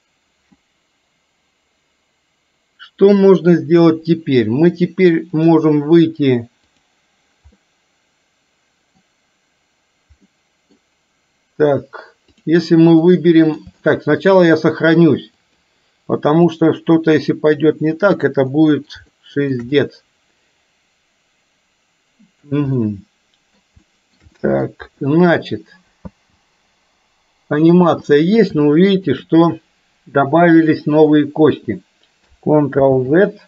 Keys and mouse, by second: 5.6-7.0 drag, 7.7-9.1 middle drag, 10.4-10.7 middle drag, 13.1-13.7 middle drag, 14.0 shift+middle click, 15.6-16.7 drag, 18.6 middle click, 19.1-19.7 shift+middle drag, 19.9-22.5 middle drag, 23.0-23.6 middle drag, 23.9-24.2 shift+middle drag, 24.5 middle click, 26.1 space, 27.9 space, 28.7-29.2 shift+middle drag, 32.9 ctrl+z.